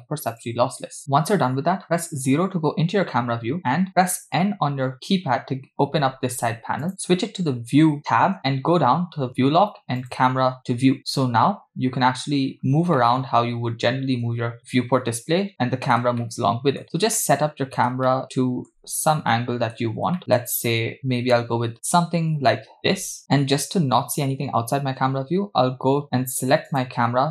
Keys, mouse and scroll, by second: 2.3 KP_0, 3.3-3.8 scroll up 1, 3.9-4.5 scroll down 1, 4.5 n, 6.8 click, 10.0 click, 11.0 n, 11.7-12.3 scroll down 2, 12.5 scroll down 1, 12.6 scroll up 3, 12.7-13.0 scroll down 2, 13.0-16.1 middle drag, 16.2-16.8 shift+middle drag, 17.2 middle click, 18.1 shift+middle click, 19.3-19.8 ctrl+middle drag, 20.2 shift+middle click, 20.7-23.2 shift+middle drag, 26.7 click.